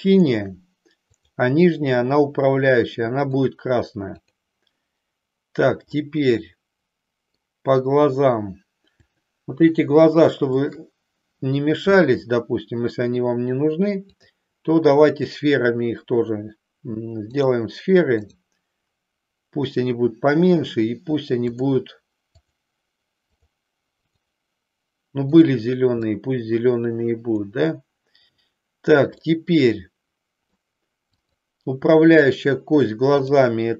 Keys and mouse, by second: 0.1 click, 1.1 click, 3.3 click, 4.4 click, 5.9-7.5 middle drag, 10.6 shift+click, 14.1-17.5 drag, 18.4 click, 25.4 click, 26.1-27.5 middle drag, 29.3-30.7 middle drag, 31.1 click, 33.1-33.7 drag.